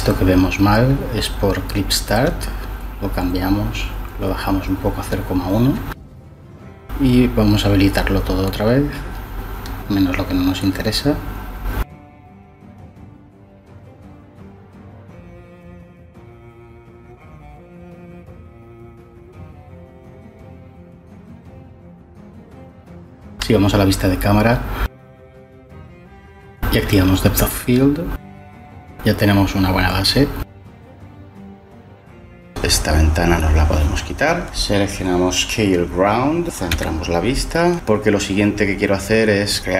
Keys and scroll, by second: 4.6 BackSpace, 4.9 3, 5.2 Return, 22.9 0, 37.0 '.